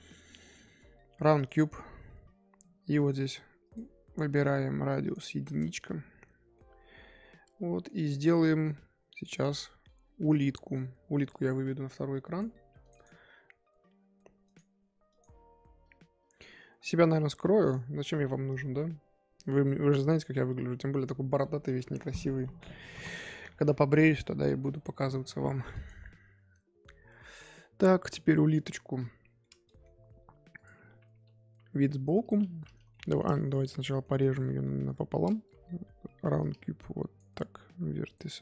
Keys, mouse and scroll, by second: 2.2-3.6 scroll up 2, 3.6-6.5 drag, 6.5-9.2 middle drag, 29.4-30.5 middle drag, 30.5 click, 31.1 KP_3, 32.2 click, 32.9-33.6 middle drag, 33.6 Tab, 33.8 middle click, 34.2 z, 34.4-35.4 middle drag, 35.4 KP_7, 36.4 click.